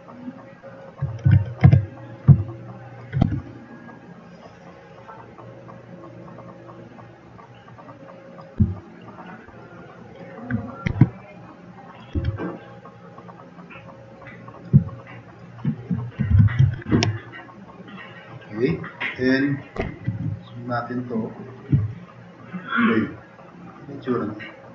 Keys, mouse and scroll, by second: 0.2-0.8 drag, 1.3 1, 1.7 1, 3.2 e, 6.1 click, 9.6-10.2 drag, 10.9 q, 11.3 drag, 12.2 e, 14.8-15.4 drag, 15.5 click, 16.1-17.8 typing, 17.0-18.5 drag.